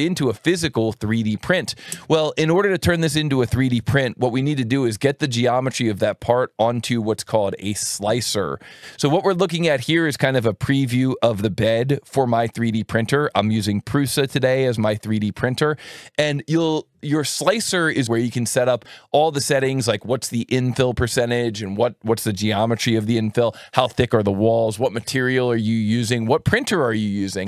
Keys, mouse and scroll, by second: 3.9 click, 9.2 click, 14.7 click, 16.5-17.8 drag.